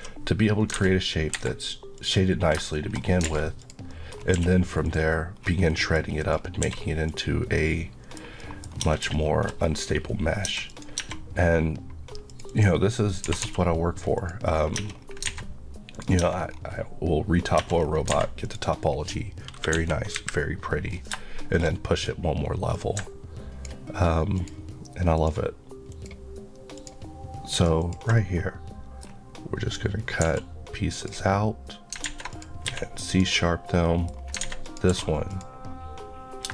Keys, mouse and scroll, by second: 0.8 alt+a, 1.3 Escape, 2.0 click, 3.0 shift+scroll up 2, 3.3 alt+a, 3.6 click, 3.9 middle click, 4.4 q, 4.8 click, 5.4-5.7 scroll up 1, 5.7 middle click, 6.2 click, 6.7 q, 7.1 click, 7.6 middle click, 8.7 scroll up 1, 9.0 Tab, 9.2 shift+middle click, 9.6 shift+scroll up 2, 10.5 Tab, 10.7 click, 11.0 Tab, 12.3 click, 13.3 typing, 14.2 click, 14.5-15.2 scroll down 2, 14.8 Tab, 15.3 alt+a, 16.0 click, 16.2 Tab, 16.5 scroll up 1, 17.6 Tab, 17.8 scroll down 1, 18.1 alt+a, 18.5 click, 19.8 KP_1, 20.2 KP_3, 20.9 scroll down 1, 21.4 shift+middle click, 21.7 shift+scroll up 1, 22.0 click, 28.2 middle click, 31.0 click, 32.1 alt+a, 32.4 click, 32.7 q, 33.1 click, 33.9 middle click, 34.1 scroll, 34.4 scroll up 1, 34.4 alt+a, 34.7 click, 34.9 q, 35.3 click.